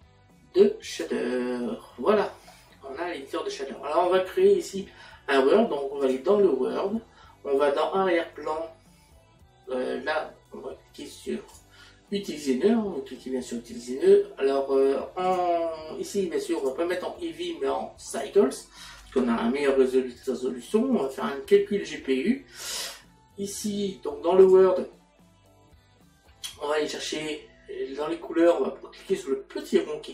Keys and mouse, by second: 1.0 click, 6.0 click, 11.0 click, 15.3 click, 16.6 click, 18.1 click, 24.4 click, 29.6 click.